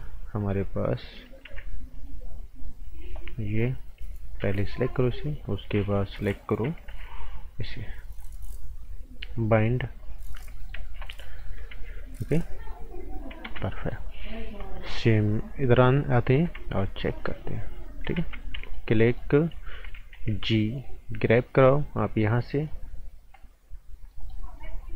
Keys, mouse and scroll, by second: 0.4 click, 1.4 t, 1.9 click, 4.4 b, 4.9 click, 6.9 t, 7.5 click, 10.3 scroll down 1, 10.5 right click, 10.8 z, 11.2 right click, 11.7 z, 12.2 click, 13.4 ctrl+z, 13.7 right click, 14.5 scroll up 1, 14.6 right click, 15.9 click, 16.1-16.5 scroll down 1, 16.5 z, 17.1 click, 18.1 ctrl+z, 18.6 right click, 19.3-20.1 scroll up 1, 20.1 g, 20.8 click, 23.8-24.1 scroll up 1, 24.1 right click, 24.6 scroll up 1.